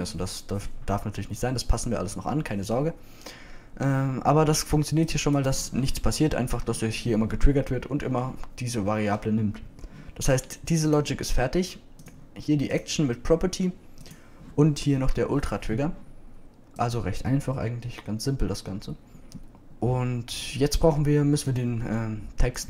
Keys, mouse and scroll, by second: 6.9-9.1 drag, 11.6 click, 21.8 middle click.